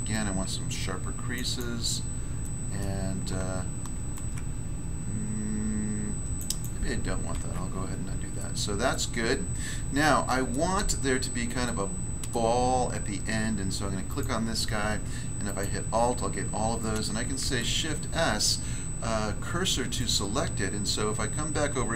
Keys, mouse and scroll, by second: 0.1 ctrl+click, 0.1 ctrl+r, 2.4 middle click, 2.8 middle click, 3.8 ctrl+r, 4.1 ctrl+click, 6.4 ctrl+click, 6.4 ctrl+click, 6.6 ctrl+click, 7.3 ctrl+z, 7.9 scroll down 1, 8.4 middle click, 8.9 middle click, 9.2 scroll down 1, 10.0 middle click, 10.5 middle click, 11.0-11.6 shift+scroll up 1, 11.6 middle click, 12.3 middle click, 12.6 scroll up 1, 14.0 right click, 14.1 right click, 15.4 alt+right click, 15.6 alt+right click, 17.4 s, 19.9 click, 20.1 click, 21.7 Tab.